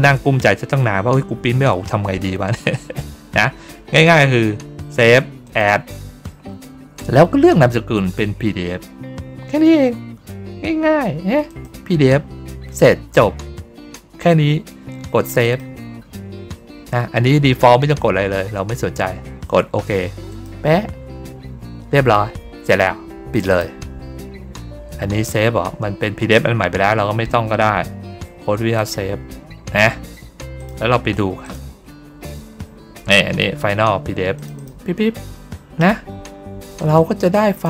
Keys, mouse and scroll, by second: 5.3 click, 7.9 click, 11.4 click, 15.3 click, 20.2 click, 23.4 click, 28.6 click, 30.5 click, 31.3 click, 34.2 click, 34.5 click, 36.7 click.